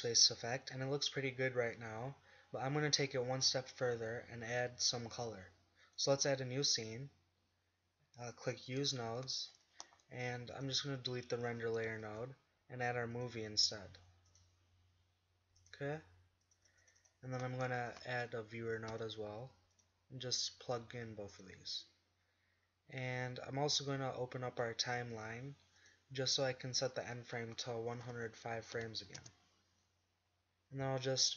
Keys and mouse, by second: 0.0 click, 7.7-14.4 drag, 21.7 g, 24.0 click, 25.9-29.5 drag.